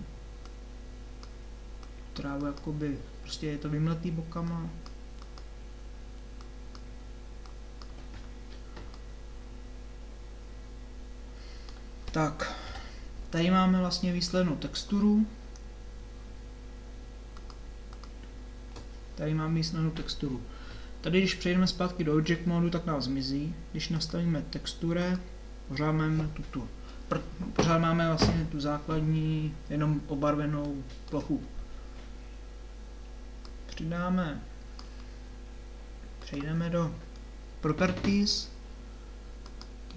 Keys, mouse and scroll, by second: 8.9 middle click, 9.3-10.7 middle drag, 12.7 KP_7, 18.1-19.4 drag, 24.0-25.6 drag, 30.7-33.4 middle drag, 33.4-34.7 drag.